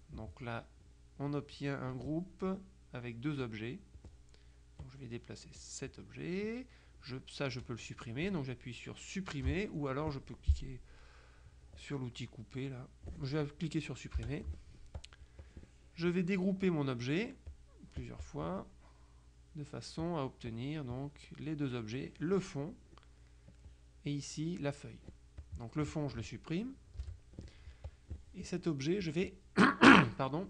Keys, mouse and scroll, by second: 4.9 click, 6.5 click, 14.3 Delete, 15.1 click, 17.6 click, 20.1-21.1 drag, 23.6 click, 25.5 click, 27.1 Delete, 28.0 click.